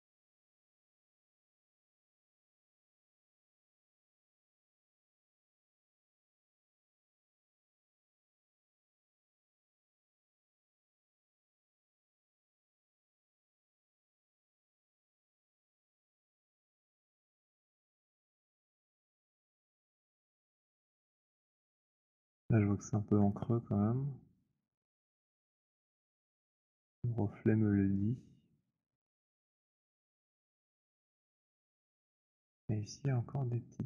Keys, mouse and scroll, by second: 0.7 click, 2.0 click, 3.0 click, 3.9 click, 4.8 click, 7.0 click, 7.9 alt+click, 8.1 alt+click, 9.6 click, 10.6 click, 11.0 click, 12.5 alt+click, 14.1 alt+middle click, 16.6 alt+click, 17.3 alt+click, 17.3 w, 17.9 click, 18.6 middle click, 19.1-19.5 scroll, 22.0 click, 24.6 alt+click, 31.7 alt+click, 32.4 click.